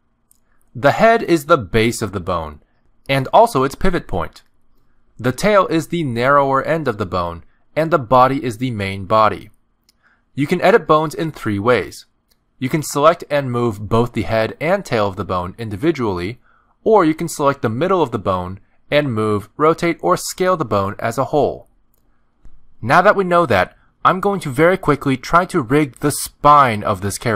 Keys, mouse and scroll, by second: 1.5 click, 5.2 click, 8.2 click, 12.5 click, 13.8 g, 15.6 click, 15.9 g, 17.4 click, 17.8 g, 19.6 r, 22.6 s.